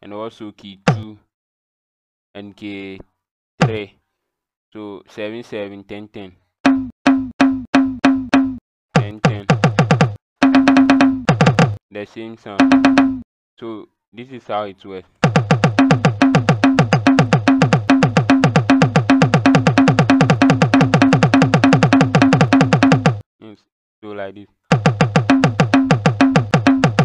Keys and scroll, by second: 0.8 KP_2, 3.5 KP_3, 6.6-11.2 typing, 12.5 KP_5, 12.9 KP_6, 15.1-23.0 typing, 24.6-27.0 typing.